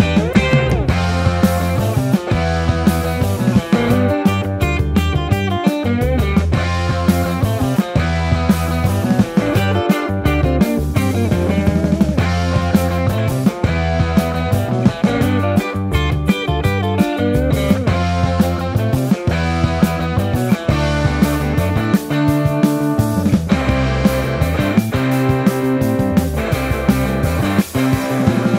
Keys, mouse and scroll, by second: 0.1 ctrl+r, 0.8 a, 0.8 s, 1.8 Tab, 2.7 shift+middle click, 3.0 Tab, 3.8-7.0 typing, 4.2 ctrl+z, 5.4 Tab, 8.6 shift+d, 8.8 shift+z, 10.2 ctrl+s, 10.3 KP_1, 11.0 shift+a, 12.7 KP_0, 14.5 r, 15.0 x, 19.6 ctrl+z, 21.4 shift+a, 23.2 click, 23.2-25.6 typing.